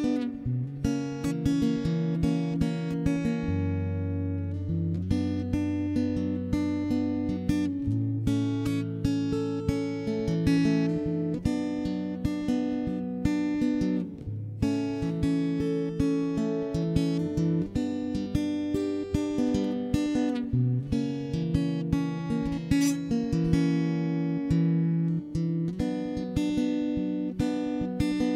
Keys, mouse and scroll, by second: 0.2 shift+space, 0.7 r, 1.3 ctrl+,, 1.6 r, 3.2-4.2 middle drag, 4.9 shift+space, 5.3 shift+space, 5.8 ctrl+s, 6.8 middle click, 7.4 ctrl+KP_1, 7.7 middle click, 8.2 a, 8.2 middle click, 8.8 c, 10.1-11.2 middle drag, 11.3 e, 12.0 ctrl+z, 12.1 ctrl+z, 12.6 right click, 12.6 middle click, 13.6 middle click, 13.9 e, 14.7 click, 15.2 middle click, 15.6 ctrl+KP_1, 15.8 middle click, 16.8 click, 18.6 click, 19.9-21.0 middle drag, 21.4 middle click, 22.5 ctrl+l, 23.0 middle click, 23.0 h, 24.0 c, 24.6-25.6 middle drag, 25.7 e, 26.4 click.